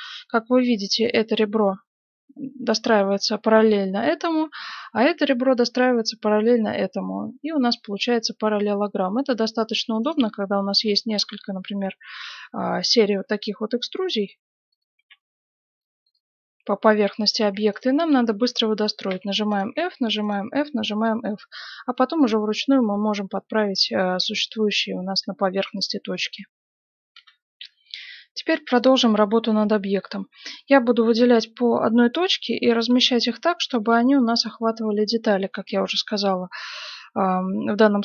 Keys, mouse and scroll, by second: 7.9-9.6 middle drag, 9.6-11.8 right drag, 10.7 e, 13.1 e, 14.9 e, 16.3-18.8 middle drag, 17.7-22.0 right drag, 19.0 f, 19.7 f, 20.4 f, 21.8 g, 23.0 right click, 24.1 g, 24.9-27.0 middle drag, 27.1 F9, 27.8 middle click, 29.9 right click, 31.6 g, 31.7-34.7 middle drag, 33.6-36.6 right drag, 33.8 g, 35.1-36.7 middle drag, 35.6 g, 37.6-38.0 middle drag, 37.6 right click.